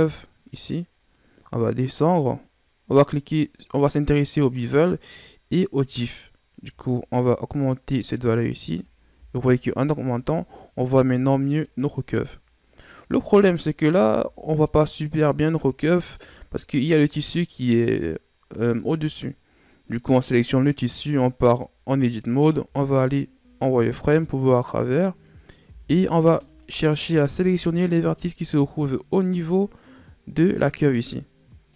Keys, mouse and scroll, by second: 0.9-1.6 scroll down 5, 1.6-2.2 scroll down 2, 2.2-5.3 scroll down 4, 6.6-8.8 drag, 8.8 scroll down 4, 9.1 a, 9.5-11.2 middle drag, 11.2-11.9 scroll down 1, 11.9-13.2 middle drag, 13.2 KP_1, 14.3-14.8 scroll up 4, 15.0-15.8 scroll up 5, 15.8-16.8 scroll down 6, 16.8 right click, 20.7 Tab, 22.6 z, 24.2 right click, 25.6 b, 27.2 b.